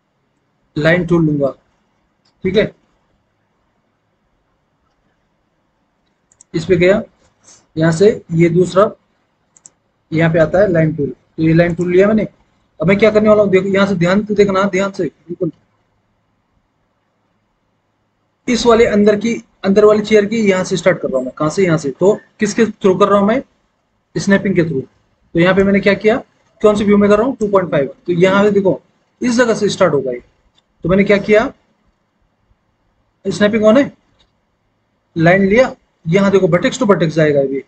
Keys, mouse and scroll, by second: 13.4-18.8 middle drag, 18.8-19.5 scroll down 1, 19.5-20.4 scroll up 1, 22.1-23.5 middle drag.